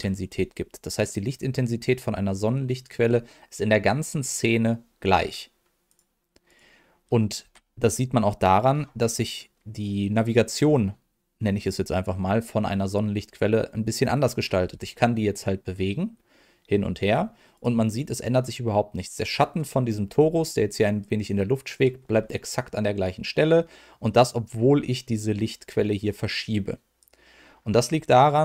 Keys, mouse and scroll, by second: 5.8 click, 6.4 click, 14.6 g, 17.5 click, 27.0 click.